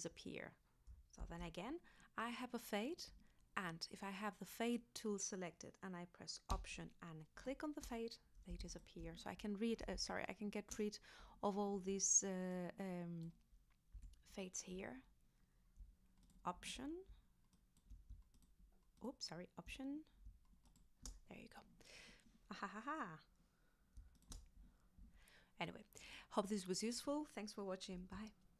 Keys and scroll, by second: 1.2 super+z, 13.9 z.